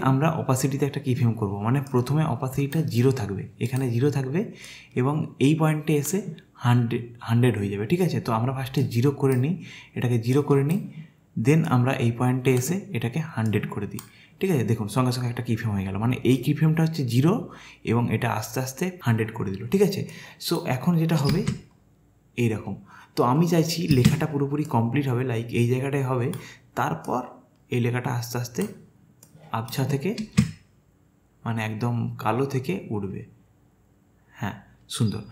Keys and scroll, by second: 25.9 space, 30.2 space.